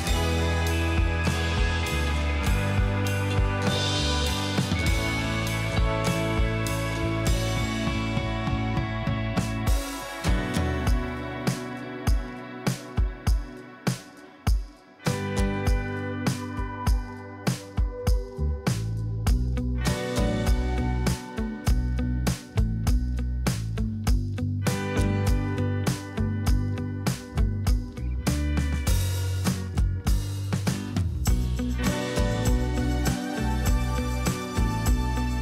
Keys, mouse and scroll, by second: 0.1 space, 2.7 ctrl+0.